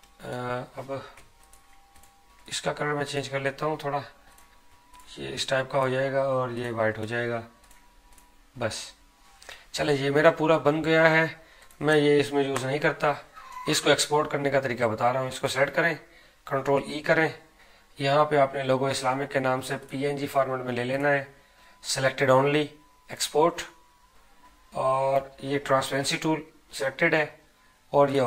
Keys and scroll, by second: 16.7 ctrl+e.